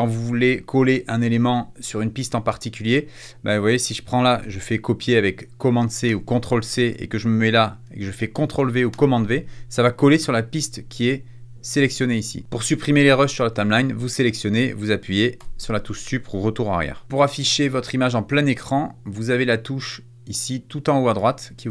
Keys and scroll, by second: 6.0 super+c, 8.8 super+v, 15.3 BackSpace.